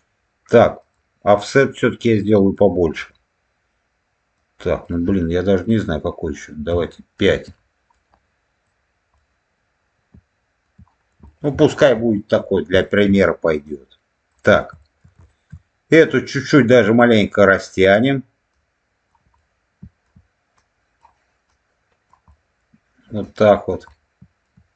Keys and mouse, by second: 0.7-7.4 drag, 7.8 middle click, 9.0-10.5 middle drag, 11.2 shift+middle click, 12.1 shift+middle click, 12.7 shift+middle click, 13.5 click, 14.7 shift+middle click, 15.1 shift+middle click, 15.9 click, 17.2 click, 18.4 click, 19.3 middle click, 20.5 click, 21.4 click, 22.2 middle click, 23.1 click, 23.8 middle click.